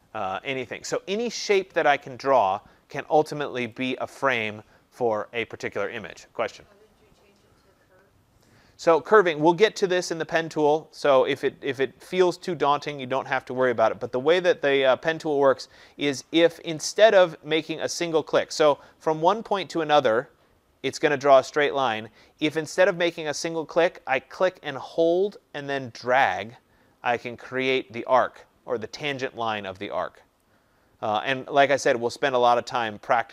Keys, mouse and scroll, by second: 3.7 click, 17.0-22.1 drag, 30.3 click, 32.3 click.